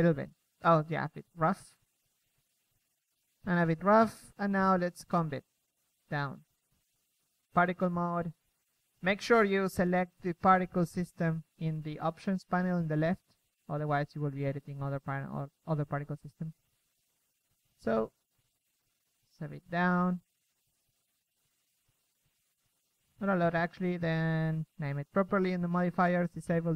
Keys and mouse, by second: 4.1 KP_3, 5.0 KP_1, 11.2 drag, 11.4 KP_3, 11.8 middle click, 16.3 KP_1, 20.1-21.1 drag, 20.9 KP_1, 21.2 KP_0, 21.9 shift+b.